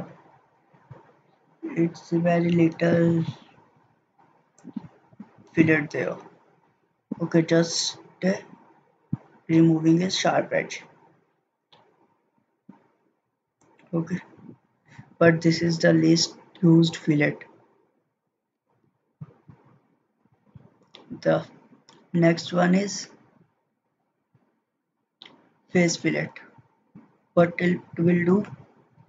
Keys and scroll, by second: 18.8 ctrl+z, 19.7 ctrl+z.